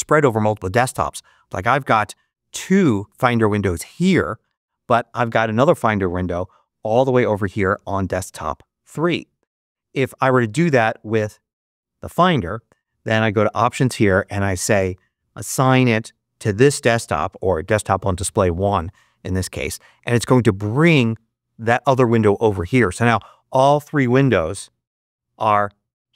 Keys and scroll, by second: 24.4 ctrl+Up.